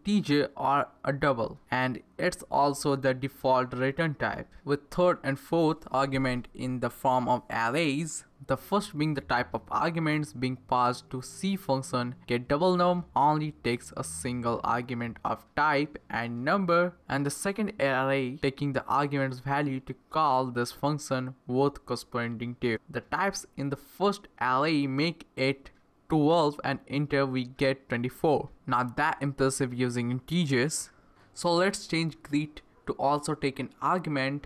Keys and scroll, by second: 0.0-0.2 typing, 1.2 Right, 2.0-7.8 typing, 4.1 Left, 8.3 Right, 9.2 ,, 10.4 typing, 11.6 Left, 12.2-15.3 typing, 16.1 Right, 16.4 Right, 17.5 ,, 18.9-20.9 typing, 19.8 Left, 20.9 Right, 21.8 Return, 29.8-32.9 typing.